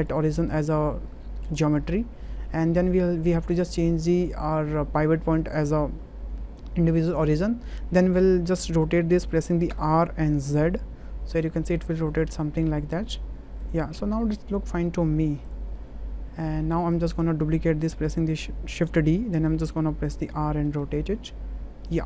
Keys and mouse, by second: 0.1-1.6 right drag, 2.2-2.8 shift+middle drag, 3.8-7.2 drag, 9.7 r, 10.4 z, 13.6 ctrl+click, 15.8-16.5 middle drag, 18.8 shift+d, 19.5 r, 20.3 z, 21.9 ctrl+click.